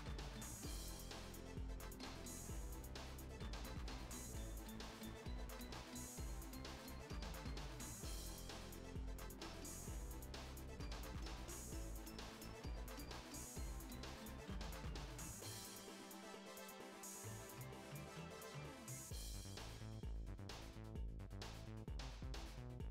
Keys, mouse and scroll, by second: 2.4-3.4 scroll up 1, 3.4-6.9 middle drag, 6.9 g, 10.1-22.9 drag.